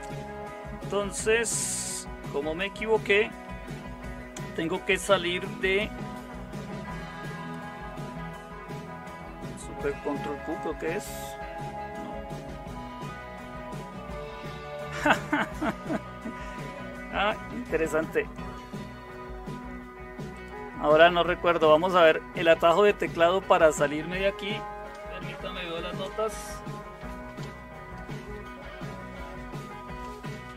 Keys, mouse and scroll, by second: 10.5 ctrl+super+q, 13.1 shift+super+q.